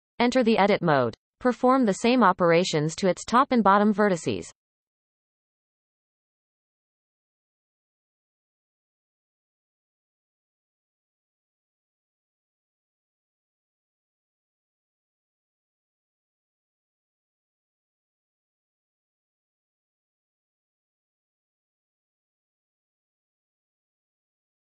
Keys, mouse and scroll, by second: 0.8 Tab, 1.5-2.0 shift+middle drag, 2.0-2.9 scroll up 3, 2.9 click, 3.4-4.9 shift+middle drag, 4.9 shift+d, 7.2 shift+middle click, 7.6 scroll up 1, 8.5 e, 10.1 click, 10.8 shift+click, 11.4 x, 13.0 click, 13.3 shift+click, 14.1 f, 14.8 click, 15.4 shift+click, 16.2 f, 16.4-17.1 scroll down 4, 17.1 shift+middle click, 17.6-18.8 scroll up 6, 18.8 click, 19.6 shift+d, 21.9 e, 23.7-24.1 shift+middle drag, 24.1-24.4 scroll up 2.